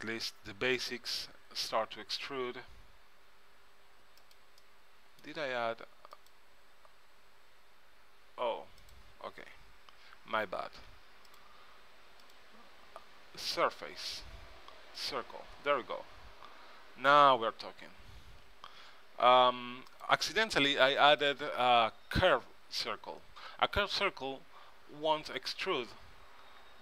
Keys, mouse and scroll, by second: 0.4 a, 0.5 a, 1.5 e, 4.7 click, 6.3-8.1 drag, 8.9 click, 9.6 Tab, 10.5 click, 11.0 x, 12.3-14.1 drag, 16.7 Tab, 17.3 Tab, 18.1 g, 21.3-23.0 drag, 25.3 Tab, 26.6 s.